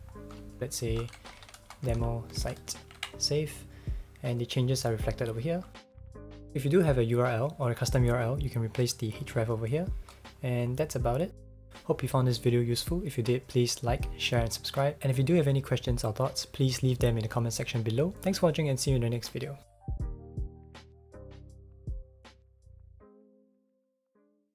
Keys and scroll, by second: 0.7-2.9 typing, 3.0 super+s.